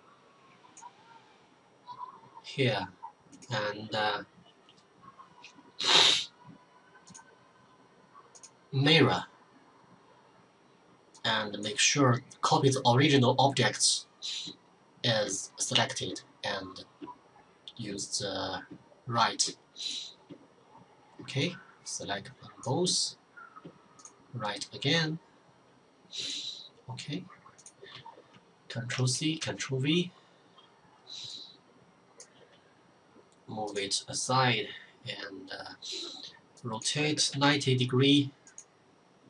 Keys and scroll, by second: 28.1 ctrl+c, 28.6 ctrl+v, 36.3-37.2 typing.